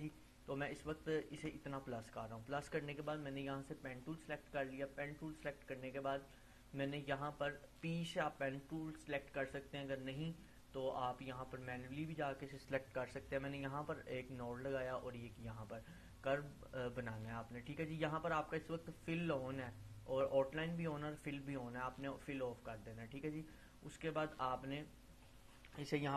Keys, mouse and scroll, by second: 4.0 click, 8.7 click, 9.7 Delete, 11.8-16.4 drag, 22.4-25.4 drag.